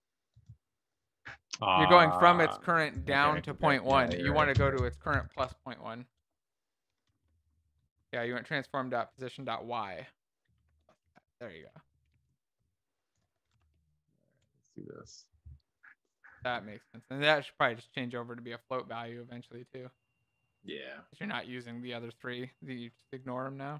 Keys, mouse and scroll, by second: 3.5 Left, 9.8 BackSpace.